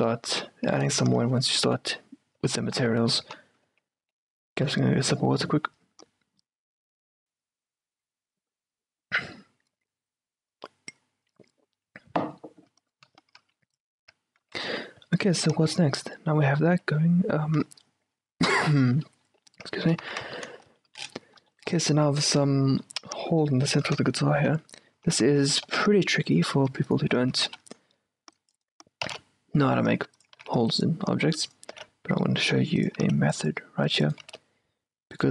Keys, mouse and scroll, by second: 0.1 Tab, 1.6 click, 2.5 Tab, 2.8 middle click, 3.3 z, 3.8 Tab, 4.1 z, 14.1 o, 14.6 z, 14.7-19.9 middle drag, 16.8 z, 19.8 q, 20.1 z, 21.8-26.5 middle drag, 24.1 Tab, 24.7 a, 25.1 a, 25.8 c, 26.5-29.1 right drag, 27.3 a, 27.6 c, 29.1 s, 30.4 a, 30.5 c, 31.8 s, 33.1 a, 33.1 c, 34.3 s.